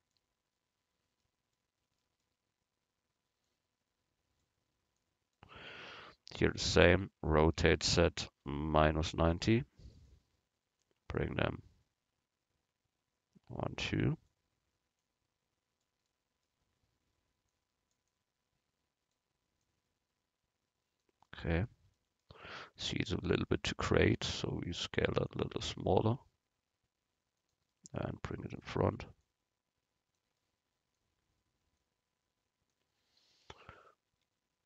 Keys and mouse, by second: 3.5-6.8 drag, 7.6 r, 10.9-12.7 drag, 15.0-16.8 drag, 16.1-17.6 middle drag, 16.1 right click, 19.2-21.3 drag, 21.3 middle click, 22.5 middle click, 24.1 s, 26.1 g, 28.6-31.0 drag, 31.8-33.5 drag, 34.2 s.